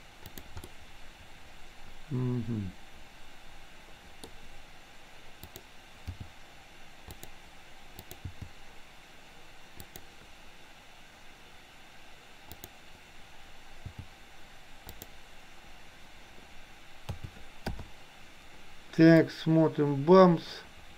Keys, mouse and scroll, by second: 0.8-4.2 middle drag, 5.5 click, 6.1 g, 8.0 click, 8.5 g, 12.5 click, 13.9 g, 17.1 a, 17.9 i, 19.2-20.9 drag.